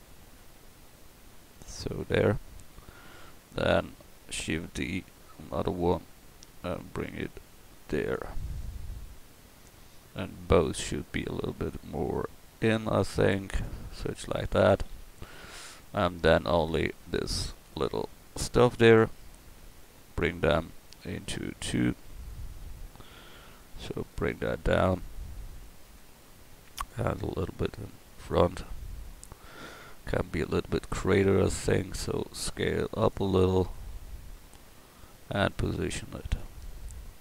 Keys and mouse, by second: 4.4 shift+d, 5.5-7.4 drag, 11.7-12.7 middle drag, 12.7 click, 14.9 a, 16.9-18.1 right drag, 20.9-23.4 drag, 23.6-24.9 middle drag, 26.0 middle click, 26.9-28.5 right drag, 28.5-32.1 drag, 32.1 s, 34.1 click, 36.0-37.0 drag.